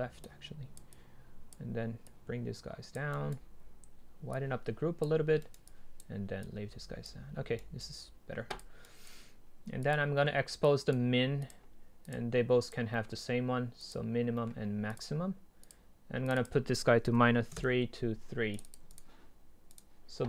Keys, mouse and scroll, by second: 2.7 click, 3.1-4.3 right drag, 4.3 click, 7.2-7.6 scroll up 2, 7.6-8.6 right drag, 8.6 drag, 8.8-9.9 right drag, 9.9 click, 10.2-10.6 middle drag, 10.6 drag, 17.6 Return, 18.6-20.2 drag.